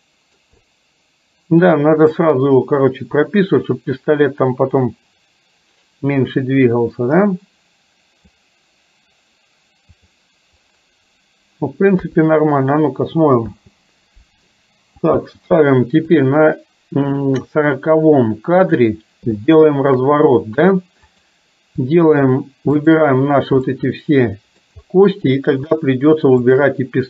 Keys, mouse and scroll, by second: 2.3-8.4 drag, 10.2 click, 12.1 KP_3, 13.6 space, 15.3 space, 16.3 click, 19.4 shift+middle click, 21.2 click, 23.8-24.7 middle drag, 26.7 shift+click.